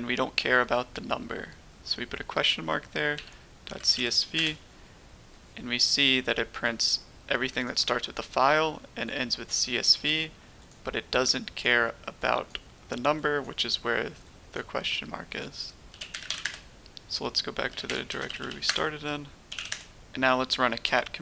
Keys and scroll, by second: 3.1-3.9 typing, 4.3 Return, 15.8-16.4 typing, 17.6-19.5 typing, 19.6 Return.